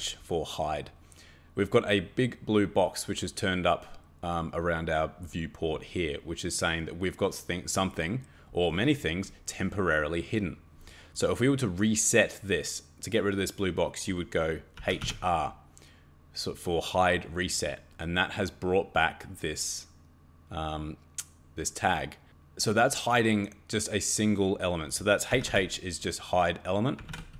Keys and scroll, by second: 14.5-15.5 typing, 25.3 h, 25.4 h, 26.7-27.3 typing.